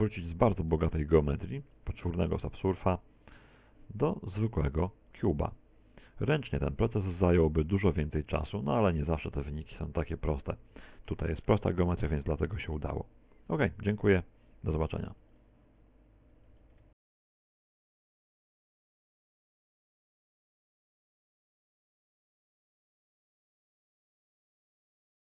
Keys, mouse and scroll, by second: 0.1 ctrl+z, 1.0 middle click, 1.3 middle click, 3.7 alt+j, 4.6-5.1 scroll down 2, 5.1 middle click, 5.1 scroll down 1, 5.3 middle click, 6.2 z, 6.5 middle click, 7.6 Tab, 9.4 ctrl+4, 10.7 click, 12.2 Tab, 12.2 click, 15.8 shift+middle click, 16.8 middle click.